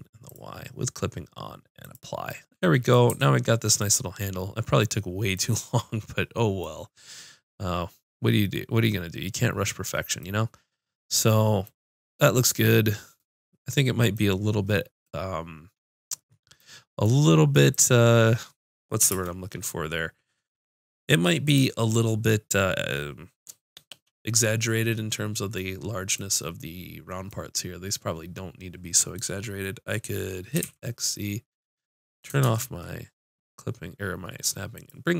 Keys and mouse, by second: 2.3 middle click, 2.7 click, 2.8 middle click, 3.0 click, 3.1 a, 8.5 middle click, 9.9 middle click, 17.7 click, 19.1 ctrl+space, 28.6 click, 30.5 g, 34.8 click.